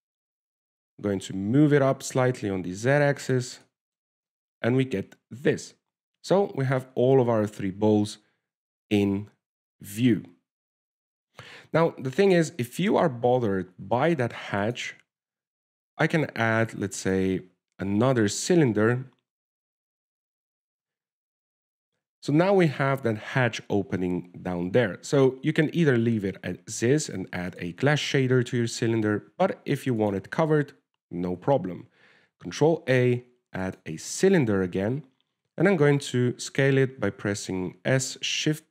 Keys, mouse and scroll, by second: 0.0 shift+middle click, 0.4-0.9 scroll up 3, 1.0 shift+middle click, 1.7 g, 4.9 shift+middle click, 6.4 alt+a, 13.3 alt+a, 13.9 alt+a, 15.1 alt+a, 15.3 click, 16.0 click, 16.3 alt+a, 17.5 shift+s, 19.8 shift+a, 23.6 alt+a, 28.8 right click, 30.3 alt+a, 31.3 click, 32.6 shift+a, 36.9 s.